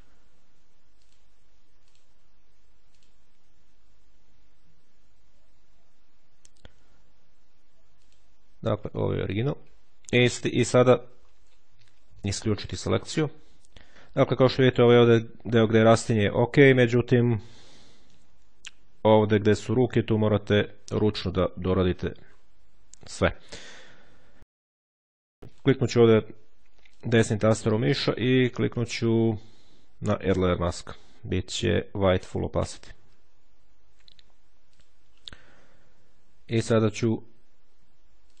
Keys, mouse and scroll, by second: 1.0 click, 1.8 click, 2.8 click, 7.9 click, 8.8 click, 10.6-11.0 shift+scroll down 2, 11.0-11.5 shift+scroll up 2, 12.1 click, 12.8 click, 13.8 ctrl+scroll up 2, 19.6-20.6 ctrl+scroll up 2, 20.8-21.4 ctrl+scroll up 3, 21.5-22.7 scroll down 3, 23.0-23.6 ctrl+scroll down 1, 25.4 click, 26.5 right click, 30.4 click, 32.5-35.0 drag, 38.0 click.